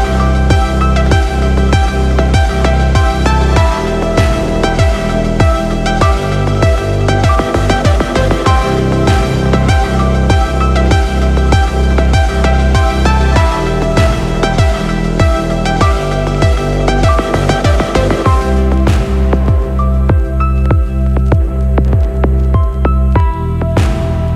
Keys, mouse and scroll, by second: 0.5 x, 5.2 click, 6.6 i, 10.2 click, 11.4 space, 13.3 click, 19.6 space, 20.1-21.1 scroll down 6, 21.1 click, 21.6 click, 24.2 g.